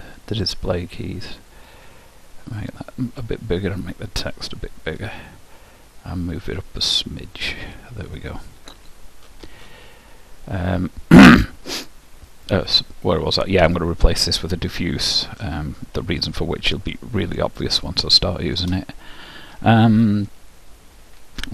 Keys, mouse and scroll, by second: 1.8-3.5 drag, 3.9-5.7 drag, 6.4-8.1 drag, 16.3-19.3 middle drag.